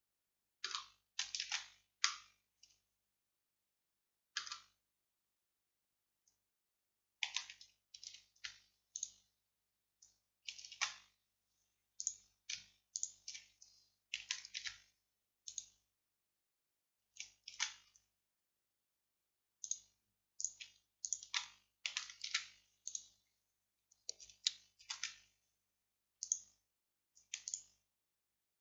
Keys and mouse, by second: 1.5 ctrl+z, 2.1-4.7 drag, 5.3-8.1 middle drag, 8.1 alt+m, 10.8 ctrl+z, 12.1-17.6 drag, 14.7 alt+m, 17.6 ctrl+z, 19.7 click, 22.4 alt+m, 22.4-24.9 drag, 24.9 ctrl+z, 26.3-28.6 drag.